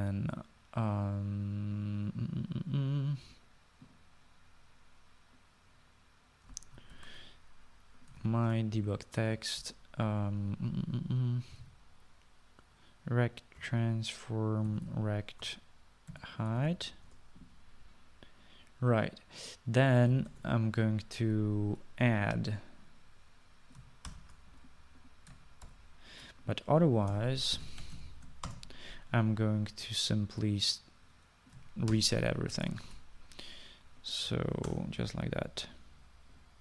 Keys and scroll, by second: 8.0 ctrl+c, 9.3 ctrl+v, 12.4-13.2 typing, 14.7 Return, 15.6-18.3 typing, 16.5 Return, 21.3 {, 21.4 Return, 25.2 ctrl+x, 26.8 ctrl+v, 28.1-29.6 typing, 33.0 ctrl+c, 33.8 ctrl+v, 35.8 BackSpace.